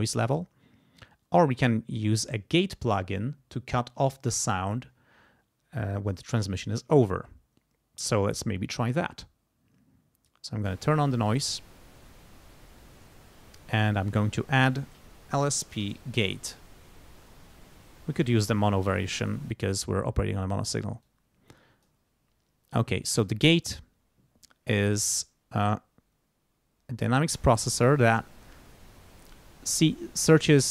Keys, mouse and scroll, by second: 10.6 click, 11.2 click, 12.9 right click, 14.1 click, 15.0-16.8 typing, 18.3 click, 19.4 click, 21.0 click, 23.0 click, 25.6-28.3 drag.